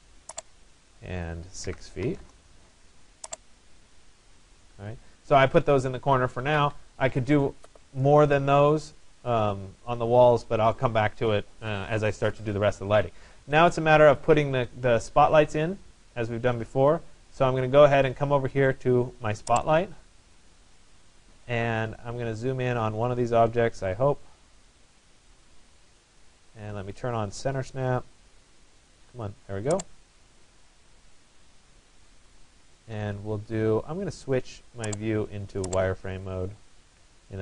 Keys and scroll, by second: 1.7 6, 2.2 Return, 6.0 Escape.